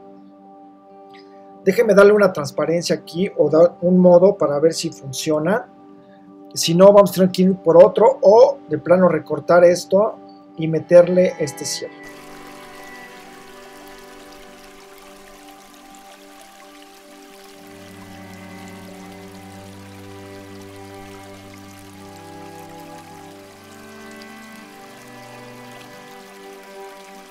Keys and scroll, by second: 5.2 v, 19.7 super+c, 20.6 alt+shift+super+v.